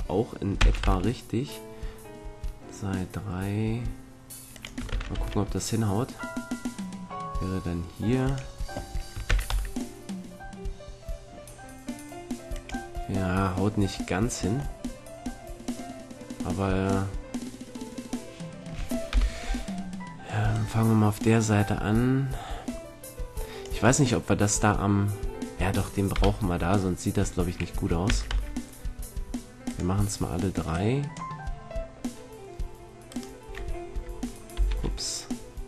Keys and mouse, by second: 0.5 shift+d, 4.6-6.7 drag, 4.9 shift+d, 8.3-10.1 drag, 9.2 shift+d, 12.6-14.6 drag, 14.7-17.1 middle drag, 19.1 KP_7, 20.5-22.0 drag, 23.6-26.1 middle drag, 26.1 KP_7, 28.0 shift+d, 29.7-32.4 drag, 32.4 middle click, 33.1-34.7 drag, 34.1 Left, 34.7 ctrl+l.